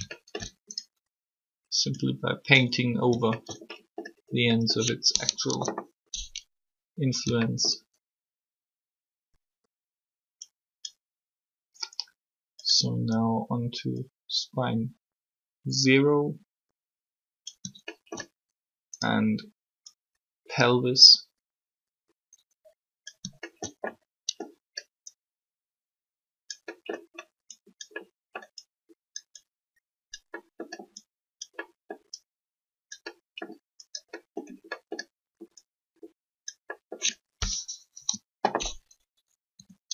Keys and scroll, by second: 5.5 3, 37.8 3.